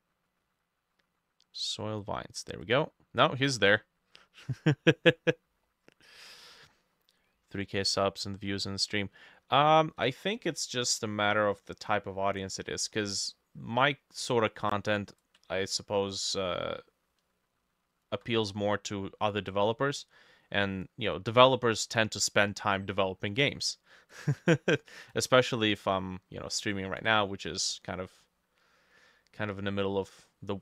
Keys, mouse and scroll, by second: 5.7 scroll down 2, 6.2-8.2 scroll up 1, 10.5-19.7 ctrl+drag, 10.5-12.9 ctrl+middle drag, 13.8 middle click, 15.4-18.5 ctrl+middle drag, 19.7-21.4 ctrl+middle drag, 23.4 middle click, 24.4-27.5 ctrl+middle drag, 28.2 middle click.